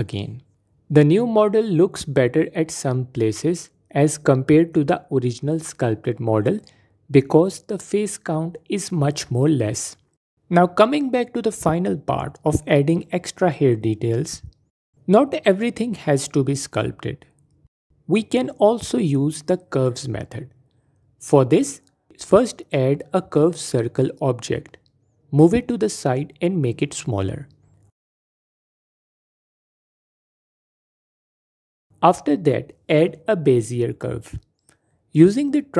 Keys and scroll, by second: 1.5 Tab, 6.6 F4, 8.1 F4, 23.7 shift+a, 28.6 typing, 31.1 s, 33.8 shift+a.